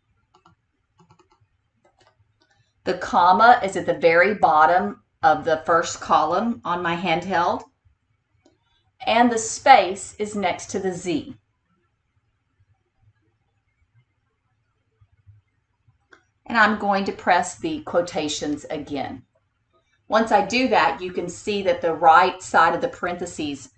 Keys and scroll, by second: 0.4 e, 1.0 l, 1.9 o, 3.9 ,, 9.5 space, 13.3 d, 18.5 ctrl+×.